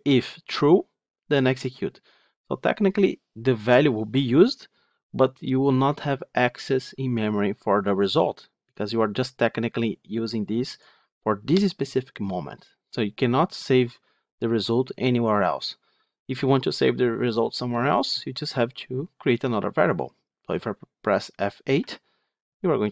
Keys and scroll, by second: 21.7 F8.